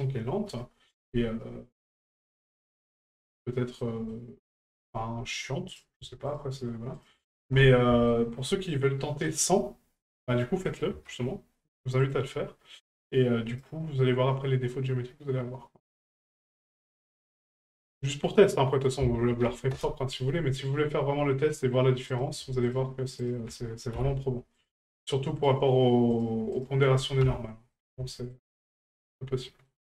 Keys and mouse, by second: 2.9 shift+middle drag, 3.9 middle click, 5.7 right click, 6.3 shift+right click, 7.0 shift+right click, 8.1 shift+middle drag, 13.5 right click, 16.2-17.6 drag, 18.0 right click, 18.8 ctrl+click, 22.1 right click, 22.6 shift+right click, 23.2 shift+right click, 24.6 right click, 25.4 shift+right click, 26.1 shift+right click, 26.5 shift+right click, 27.7 middle click, 28.1 shift+middle click, 28.5 middle click, 29.0 shift+middle click, 29.4 middle click.